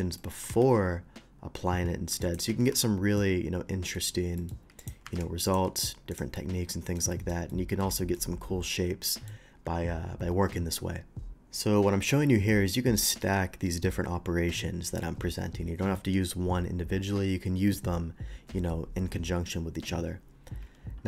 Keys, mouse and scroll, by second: 0.2 ctrl+middle click, 0.5 ctrl+b, 2.2 click, 2.4 Tab, 3.2 shift+Tab, 3.2-3.9 middle drag, 4.4 shift+middle click, 4.8 shift+click, 5.0 q, 5.5 click, 6.1 click, 6.4 middle click, 7.1 shift+middle click, 7.5-7.8 shift+middle drag, 8.0 shift+middle drag, 8.7-9.3 shift+middle drag.